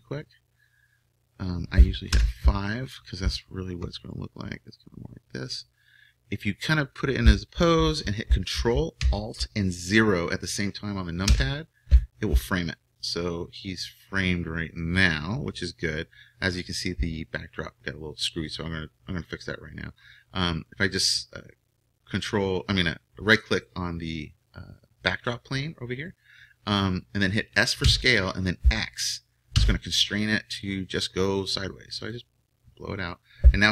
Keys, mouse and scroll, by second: 0.8-2.1 middle drag, 2.1 KP_5, 4.7-11.2 drag, 11.2 ctrl+alt+KP_0, 20.3-26.0 middle drag, 26.0-28.0 right drag, 27.8 s.